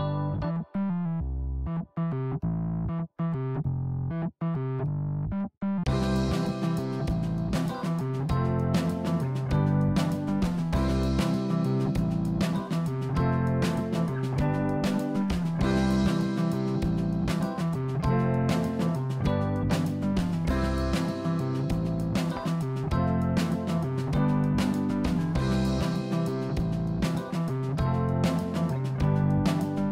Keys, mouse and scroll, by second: 0.5-2.2 drag, 3.7 shift+a, 10.8 g, 13.0 r, 17.7 r, 23.3 click, 24.2 Tab, 25.2 click, 26.1 click, 27.3 click, 27.4 click, 28.9 click, 29.1 click.